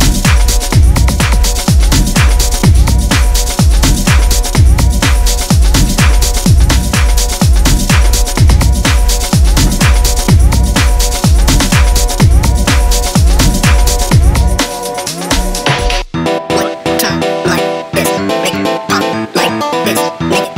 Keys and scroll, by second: 0.5 ], 0.7 ], 7.2 4, 10.0 0, 10.1 Return, 20.1 2.